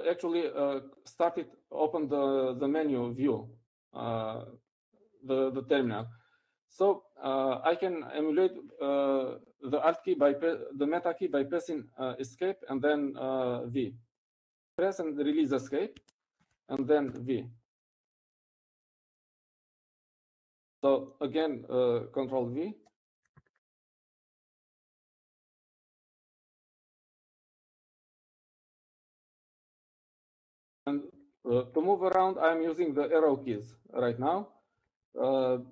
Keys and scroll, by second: 26.5 ctrl+v.